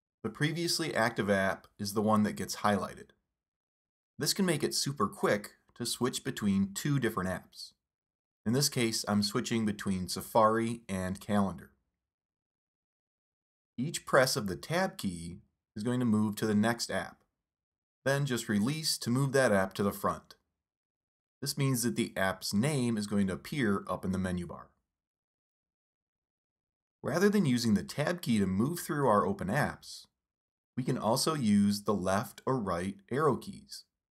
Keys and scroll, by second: 6.1 super+Tab, 7.8 super+Tab, 9.6 super+Tab, 10.7 super+Tab, 11.3 super+Tab, 13.1 super+Tab, 19.0 super+Tab, 21.7 super+Tab, 24.1 super+Tab, 26.0 super+Tab, 30.4 super+Tab, 32.9 super+Right.